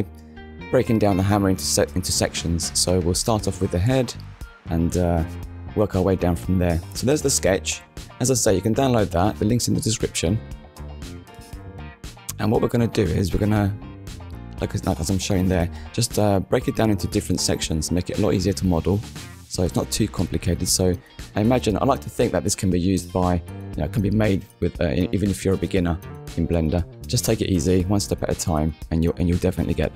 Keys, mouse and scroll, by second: 0.0 click, 4.3 click, 26.5 click.